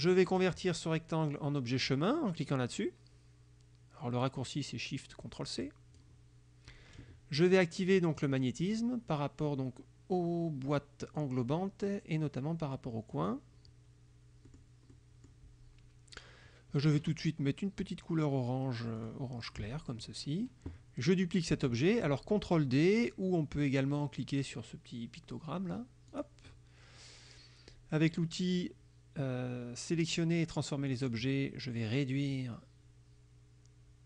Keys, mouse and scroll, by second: 0.4 click, 5.7 click, 8.2 click, 8.7 click, 11.1 click, 13.2 click, 14.6 click, 15.0 click, 19.1 click, 26.2 click, 31.0 click, 32.4-34.0 drag.